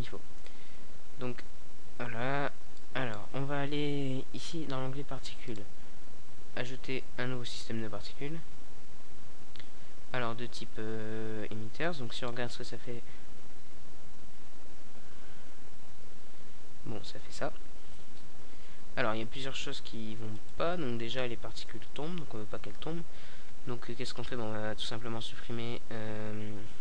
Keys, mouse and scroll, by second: 0.1 alt+a, 1.5-2.5 drag, 2.7-3.1 drag, 11.2 alt+a, 13.6 middle click, 15.8 a, 16.8 alt+a, 24.1-26.7 middle drag, 26.7-26.8 drag.